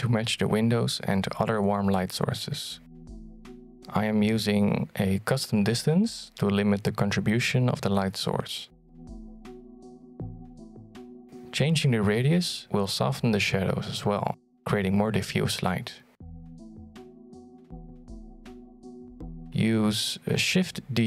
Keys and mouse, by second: 2.2-3.4 drag, 5.0 click, 10.2-11.6 shift+drag, 14.6-19.5 shift+drag.